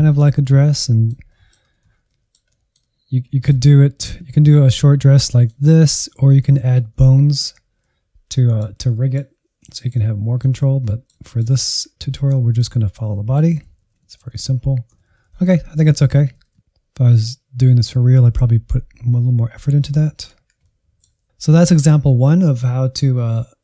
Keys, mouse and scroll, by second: 0.2 Right, 0.3 Right, 0.4-1.9 middle drag, 1.9 scroll down 1, 2.1 middle click, 3.0-3.8 Left, 4.1 Left, 4.3-6.2 middle drag, 6.2 scroll up 1, 6.4 shift+middle click, 6.9 Insert, 7.4-8.4 middle drag, 8.4-8.9 Right, 9.0 middle click, 9.4 scroll up 1, 9.5 Insert, 9.7 middle click, 10.1-10.4 scroll up 2, 10.4 Right, 10.5 Right, 10.9-11.3 Left, 11.8 Right, 11.9 Right, 12.0-12.4 scroll down 7, 12.4-12.8 Right, 13.4 scroll down 2, 13.6 middle click, 14.2-14.5 scroll up 4, 14.5 middle click, 15.3-23.6 drag.